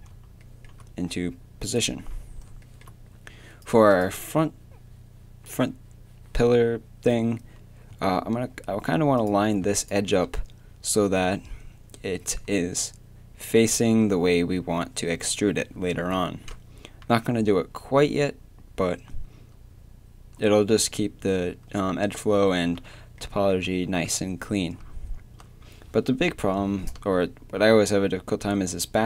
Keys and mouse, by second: 0.0-1.2 middle drag, 1.7-7.9 right drag, 7.9 a, 9.2-14.2 right drag, 17.5 a, 23.2-29.0 middle drag.